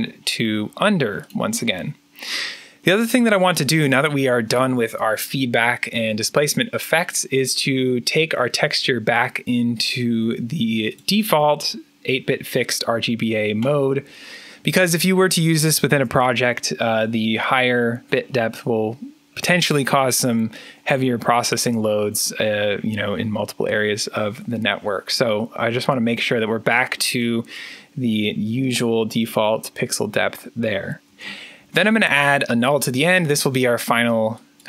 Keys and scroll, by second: 31.0 alt+n.